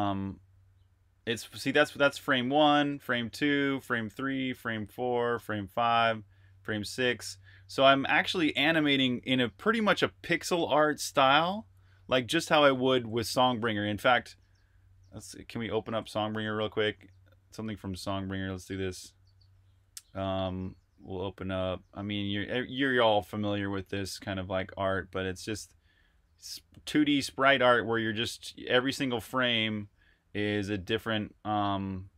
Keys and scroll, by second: 14.8 super+Tab.